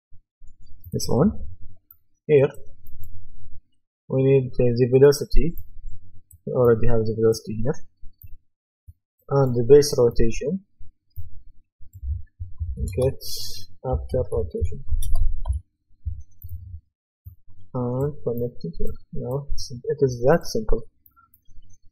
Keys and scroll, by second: 12.3-16.0 typing.